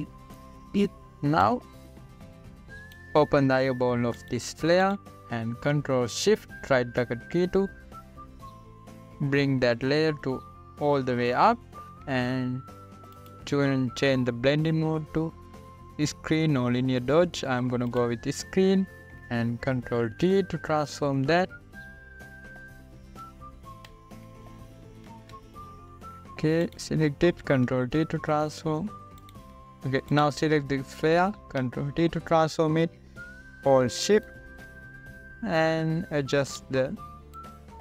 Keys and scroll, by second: 8.2 ctrl+shift+], 13.0 =, 21.7 ctrl+t, 24.7 ctrl+t, 26.7 ctrl+t, 29.1 ctrl+t, 33.1 ctrl+t.